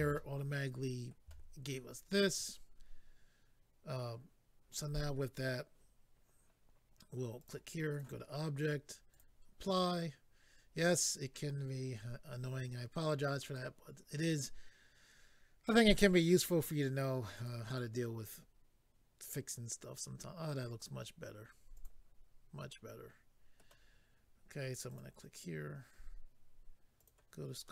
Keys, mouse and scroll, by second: 0.1 shift+middle click, 7.4 click, 7.4 click, 7.9 click, 8.0 double click, 9.1 double click, 9.2 double click, 13.4 click, 13.5 click, 15.9 click, 15.9 click, 17.3 click, 17.5 click, 17.7 click, 17.8 click, 18.2 click, 18.3 click, 21.7 click, 21.8 click, 22.7 middle click, 24.9 click, 25.0 click, 27.0 click, 27.1 click, 27.6 middle click.